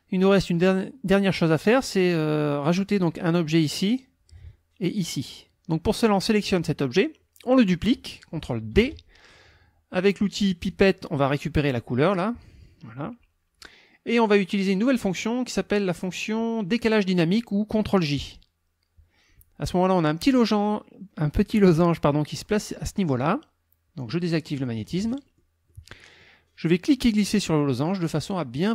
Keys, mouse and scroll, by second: 0.2 click, 6.0 click, 8.8 ctrl+d, 10.7 click, 11.7 click, 14.7 click, 18.2 click, 24.6 click, 25.2 middle click, 25.7 middle click, 27.2-28.7 drag.